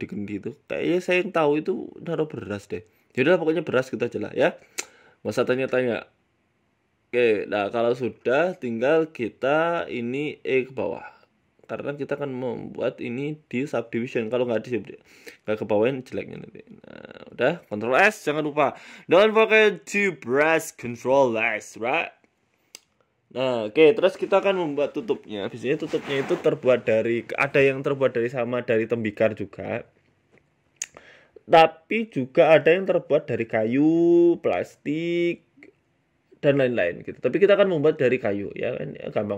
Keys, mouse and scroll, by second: 1.4 ctrl+b, 6.0 right click, 6.2 Tab, 6.4 middle click, 8.0 Tab, 8.2 middle click, 9.3 click, 10.2 right click, 10.8 e, 12.3 middle click, 12.9 Tab, 13.2 middle click, 14.3-14.7 scroll down 4, 14.5 middle click, 15.2-15.7 scroll down 1, 15.7 click, 17.0 middle click, 17.3-19.8 scroll down 2, 21.2 KP_1, 21.8 scroll down 1, 21.8 scroll down 1, 22.4 shift+a, 24.0 s, 24.6 s, 25.3 ctrl+z, 25.5 s, 26.6 s, 27.5 middle click, 27.8 s, 28.7 g, 29.9 middle click, 30.3 s, 31.9 g, 33.8 click, 35.5 click, 36.5 click, 36.8 scroll up 4, 37.9 shift+click.